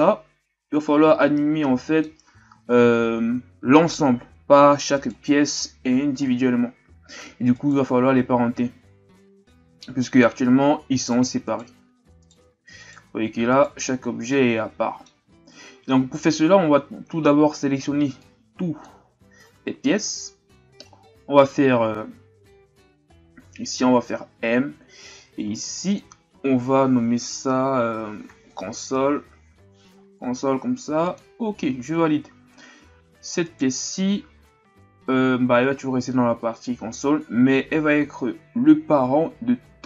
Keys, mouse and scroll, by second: 1.6-5.0 middle drag, 5.0 right click, 7.6 right click, 10.3 g, 11.4 right click, 12.8 right click, 14.3-18.7 middle drag, 33.4 right click.